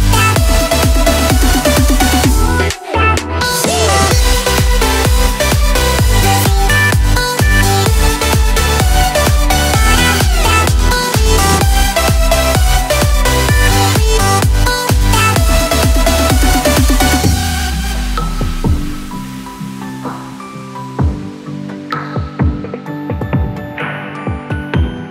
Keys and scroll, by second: 2.3 [, 6.6 f, 7.9 f, 11.6 x, 16.8 [, 17.5 [, 18.4 ], 19.0 f.